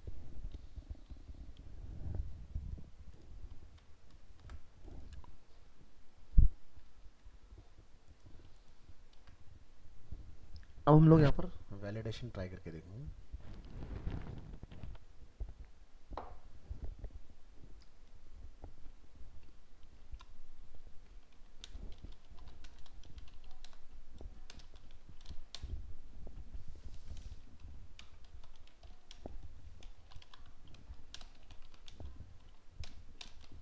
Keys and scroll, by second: 4.4 ctrl+s, 9.2 ctrl+s.